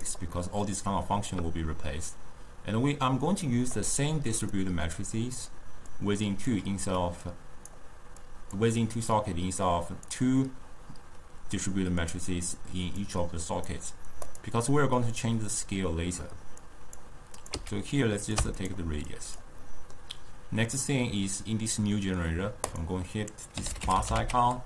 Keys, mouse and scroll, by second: 0.4-2.2 middle drag, 2.2 drag, 4.6-7.4 drag, 8.3 click, 9.7 click, 13.1-14.5 drag, 16.7 click, 17.4 click, 18.0 x, 18.3 click, 19.2 click, 19.7-22.8 middle drag, 22.8-24.6 drag.